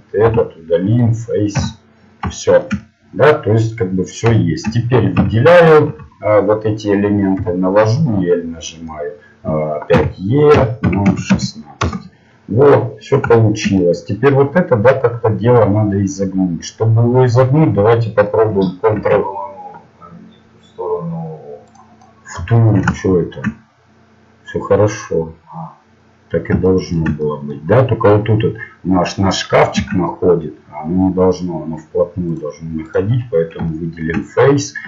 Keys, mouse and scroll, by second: 1.0 x, 1.5 z, 5.1 a, 5.8 a, 7.4 l, 7.9 l, 8.3 l, 8.6 middle click, 9.9 e, 13.0 middle click, 13.4 middle click, 17.5 middle click, 18.9 ctrl+r, 22.0-26.4 middle drag, 26.6-29.4 middle drag, 33.0 ctrl+Tab, 33.0-34.8 right drag.